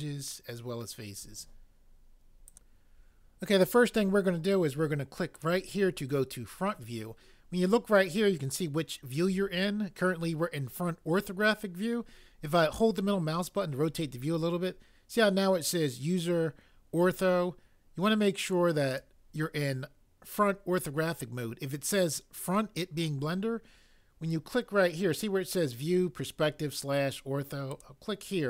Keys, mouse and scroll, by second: 18.9 click.